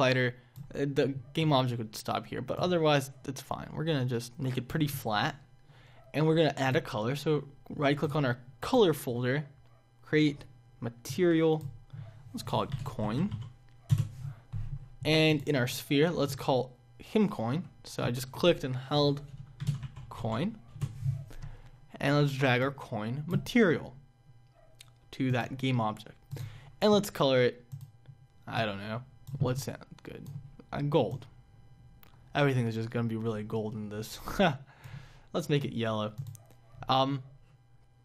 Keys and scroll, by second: 13.8 Return, 20.7 Return.